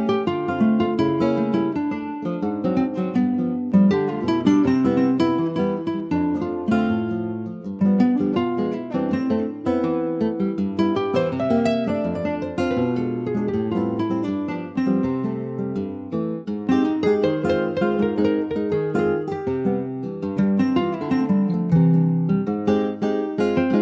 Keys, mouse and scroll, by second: 0.2 middle click, 0.7 Tab, 1.2 click, 2.3 3, 2.6-3.2 scroll up 2, 3.2 click, 3.7-6.1 middle drag, 6.1 shift+click, 6.6 middle click, 7.6 s, 13.9 Tab, 14.1 click, 14.5 middle click, 14.9 ctrl+s, 15.0 click, 15.3 shift+middle click, 15.5 shift+scroll up 1, 15.7 Tab, 16.0 middle click, 16.2-16.9 scroll up 1, 16.9 Tab, 17.5 ctrl+a, 18.5 Tab, 18.9 click, 19.7 click, 21.1 middle click, 21.5 3, 22.0 click, 22.5 shift+middle click, 23.1 2.